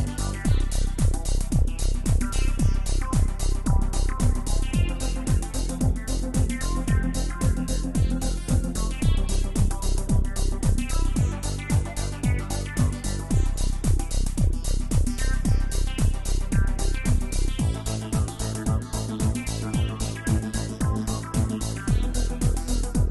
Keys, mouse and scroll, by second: 0.8-5.2 middle drag, 5.2 click, 6.5 click, 7.9 click, 8.4 scroll down 3, 9.4-12.3 drag, 12.3 scroll up 1, 12.9 click, 20.8 click, 21.5-23.1 middle drag.